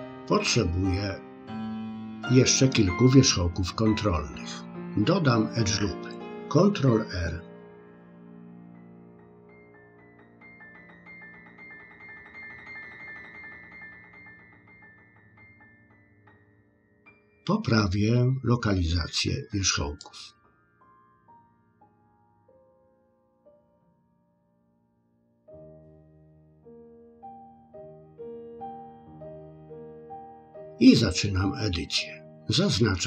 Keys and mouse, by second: 8.4 ctrl+r, 12.5 ctrl+r, 20.0-21.0 drag, 21.7 click, 23.2 click, 24.5 click, 26.0-28.2 drag, 28.8 middle click.